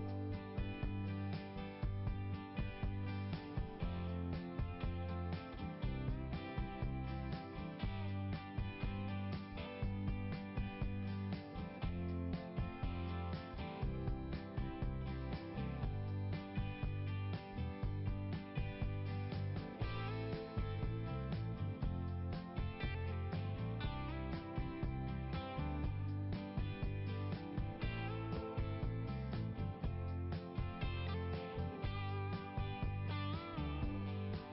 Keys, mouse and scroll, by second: 2.5 click, 2.6 click, 3.1 scroll down 1, 3.5 scroll up 1, 3.6 scroll down 1, 3.8 scroll up 1, 4.0 scroll down 1, 4.2-4.6 scroll up 1, 6.4-6.9 scroll down 2, 7.6 right click, 7.7 right click, 11.3 click, 11.4 click, 11.6 click, 11.6 click, 12.0-13.7 scroll down 1, 15.3 click, 15.4 click, 16.4 click, 17.1 right click, 17.4 right click, 19.9 click, 20.1 click, 21.0 click, 21.4 click, 27.3 scroll up 1, 33.9 scroll down 1.